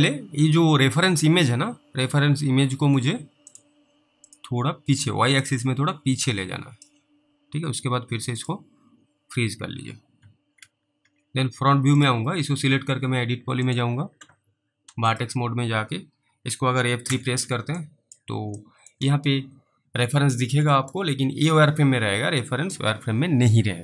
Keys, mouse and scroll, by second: 3.5 a, 3.5 click, 5.8 click, 8.4 click, 10.6 alt+w, 11.0 alt+w, 12.0 click, 17.1 alt+F3, 18.1 click, 20.9 middle click.